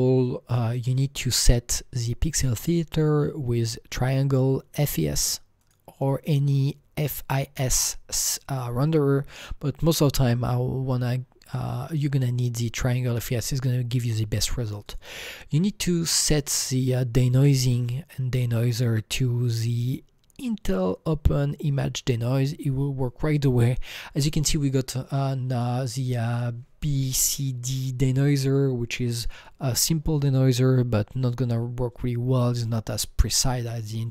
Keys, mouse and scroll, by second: 0.9 click, 2.5 click, 5.5 click, 5.6 click, 6.2 click, 14.8 click, 15.6 click, 16.1 click, 19.2 click, 22.3 click, 24.4 click.